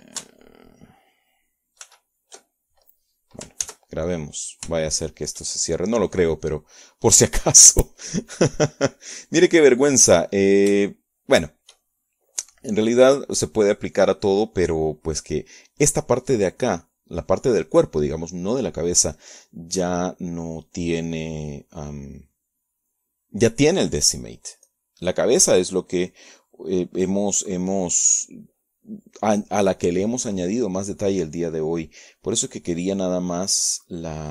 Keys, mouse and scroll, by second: 0.1 ctrl+click, 0.9 shift+click, 3.7-5.1 drag, 5.2-6.7 drag, 6.8-7.9 shift+drag, 20.7 click.